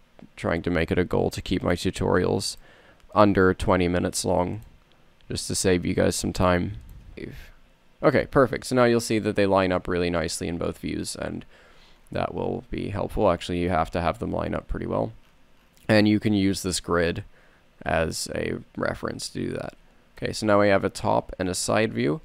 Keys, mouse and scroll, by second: 1.0-5.7 drag, 7.1 KP_Divide, 7.1 BackSpace, 11.3 n, 12.2 n, 20.8 middle click, 21.2 middle click, 21.5 middle click, 21.9 middle click.